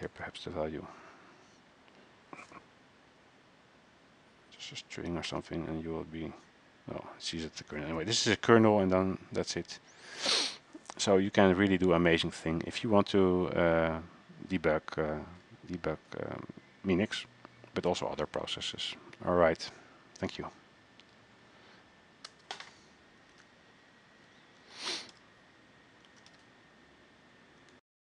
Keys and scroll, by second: 23.6 alt+Tab, 24.9 ctrl+a, 25.3 0, 26.2 ctrl+a, 26.4 n, 28.0 ctrl+c.